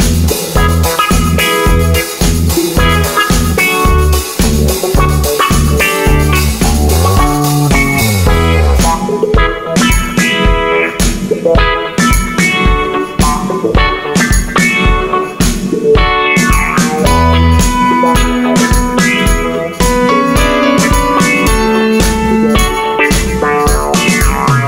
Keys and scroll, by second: 10.4 BackSpace.